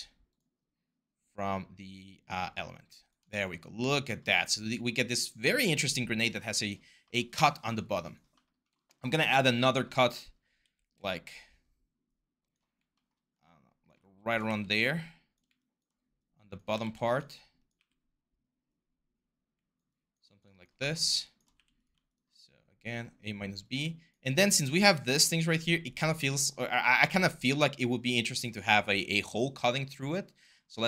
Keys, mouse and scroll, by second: 10.4 r, 14.3 w, 16.6 ctrl+z, 17.6 r, 21.3 q.